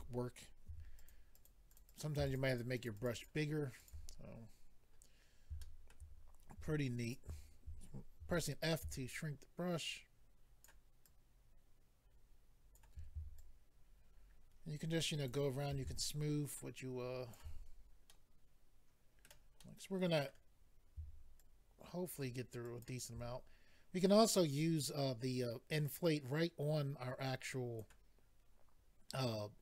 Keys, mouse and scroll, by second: 0.6 f, 0.9 double click, 1.1 double click, 1.3 click, 1.4 double click, 1.7 double click, 1.8 double click, 1.8 double click, 2.0 double click, 2.2 shift+click, 2.3 double click, 2.5 shift+click, 2.6 double click, 2.7 double click, 2.8 shift+click, 2.9 shift+click, 3.0 shift+double click, 3.1 shift+click, 3.2 shift+click, 3.8 shift+click, 3.9 shift+click, 4.2-4.9 scroll down 4, 4.9 scroll up 2, 5.6 shift+middle click, 6.6 f, 7.0 click, 7.1 click, 8.2 ctrl+f, 8.6 click, 8.7 click, 9.1 ctrl+click, 11.0 ctrl+click, 13.4 shift+click, 16.0 ctrl+click, 17.7-18.1 scroll down 3, 18.1 middle click, 19.6 middle click, 20.6-21.0 scroll up 2, 21.4 shift+click, 22.6 shift+click, 22.8 shift+click, 25.8 click.